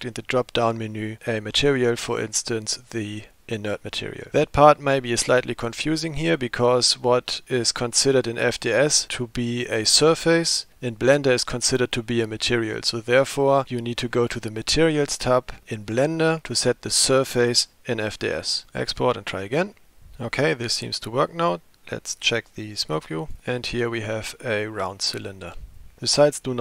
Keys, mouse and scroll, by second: 0.0-3.8 drag.